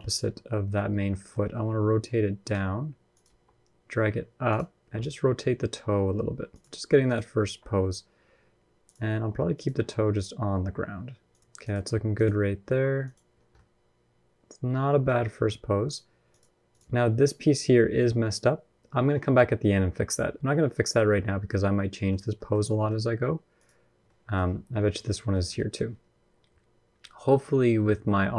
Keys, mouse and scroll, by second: 0.0 ctrl+KP_3, 0.9 shift+middle click, 1.5 t, 2.3 r, 3.0 g, 4.8 click, 5.3 r, 6.8 click, 7.2 g, 8.9 r, 9.5 g, 11.4 click, 11.4 g, 12.5 r, 13.1-13.5 scroll down 4, 13.3 middle click, 14.9-15.6 scroll up 2, 15.6 click, 21.1 scroll down 1, 21.2 middle click, 21.9 scroll up 1, 22.2 middle click, 22.5 middle click, 22.7 scroll up 1, 23.3 click, 23.3 scroll up 1, 23.8 middle click, 25.0 scroll up 1, 25.2 shift+middle click, 25.3 middle click.